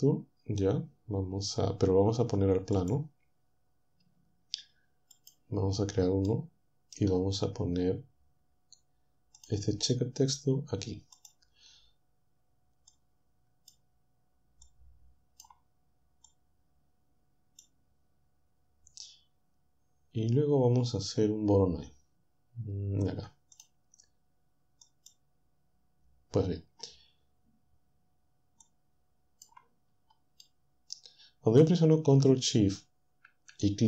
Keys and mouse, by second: 2.8 click, 5.2 click, 6.3-7.4 middle drag, 9.4 click, 11.2 click, 12.9 click, 14.7-20.3 drag, 23.6 click, 24.9 click, 28.7 click, 30.5-32.1 drag.